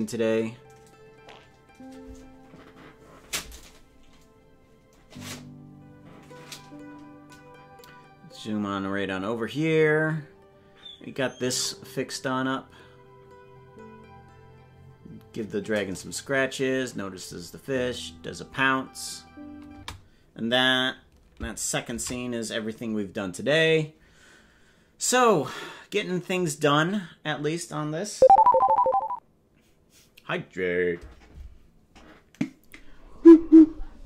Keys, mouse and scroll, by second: 19.8 space, 24.5 ctrl+s.